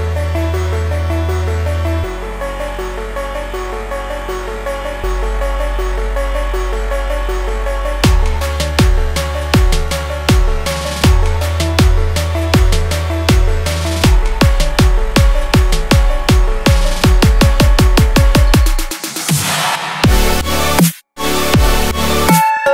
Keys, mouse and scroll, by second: 8.6 Up, 8.9 Up, 9.2 Up, 9.4 Up, 9.6 Up, 9.9 Up, 11.0-20.1 drag.